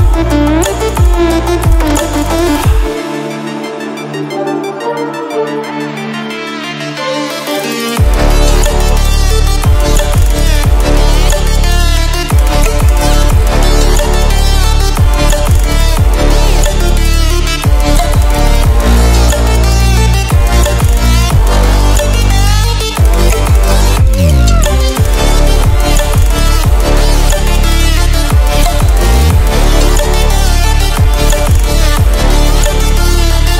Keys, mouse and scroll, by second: 8.6-9.3 typing, 10.4 ctrl+w, 12.5 ctrl+w, 15.2 ctrl+w, 16.5 ctrl+w, 17.5 Return, 18.4-30.1 drag.